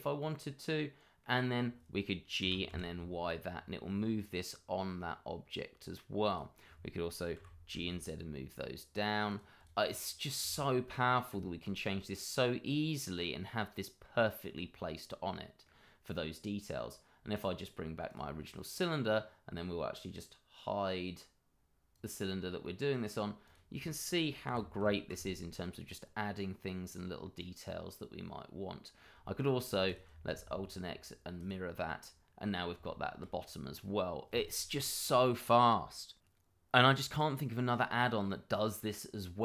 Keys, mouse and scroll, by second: 0.2 middle click, 2.4 g, 2.6 y, 6.3 click, 7.3 g, 7.7 z, 9.6 double click, 9.8 middle click, 10.7 shift+middle click, 11.4 middle click, 11.5 shift+middle click, 12.0 middle click, 13.1-13.6 scroll up 1, 13.6 middle click, 14.4-14.7 scroll down 1, 14.7 middle click, 18.0 click, 18.5 middle click, 21.9 click, 22.6 middle click, 23.4 click, 24.4 g, 25.1 z, 26.8 click, 27.4 middle click, 29.2 shift+middle click, 29.8 shift+click, 29.9 click, 30.3 alt+x, 31.3 click, 31.8 middle click, 32.8 shift+middle click, 32.9 middle click, 33.1 shift+middle click, 33.8 middle click, 38.3 middle click.